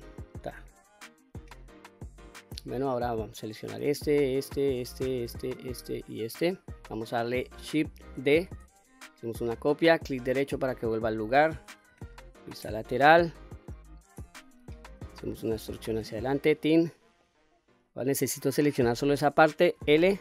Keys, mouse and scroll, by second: 0.2 click, 0.7 scroll down 1, 1.0-2.0 middle drag, 2.3 middle click, 3.3 click, 4.1 shift+click, 4.6 shift+click, 5.1 shift+click, 5.5 shift+click, 6.0 shift+click, 6.5-6.9 scroll down 1, 7.0 middle click, 8.2 shift+d, 10.2 right click, 10.8 middle click, 11.9 KP_3, 14.2 e, 16.3 click, 16.6 scroll down 1, 16.7 middle click, 17.5-17.8 scroll up 1, 17.8 middle click, 19.7 l.